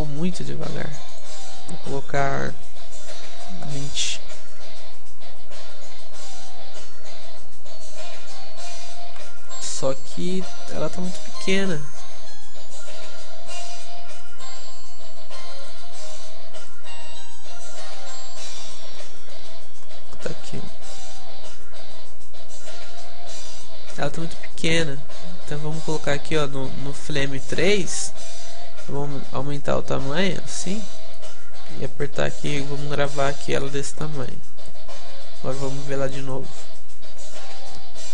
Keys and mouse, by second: 9.3 click, 10.4-12.0 middle drag, 12.0-13.8 drag, 14.6-22.6 drag, 15.6 middle click, 19.0 right click, 19.4 a, 20.8 right click, 29.0 middle click, 29.0 s, 34.4-38.1 drag, 36.6 middle click.